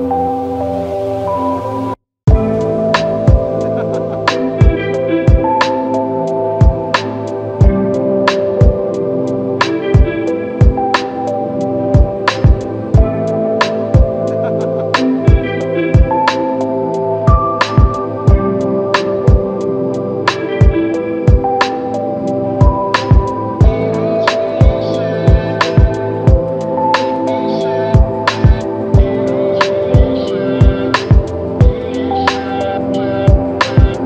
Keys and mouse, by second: 1.8 f, 3.6 alt+click, 13.6 ctrl+i, 16.1 alt+click, 18.2 alt+shift+click, 18.8 alt+click, 20.5 f, 23.2 double click, 26.7 shift+click, 28.7 alt+click, 31.3 alt+m.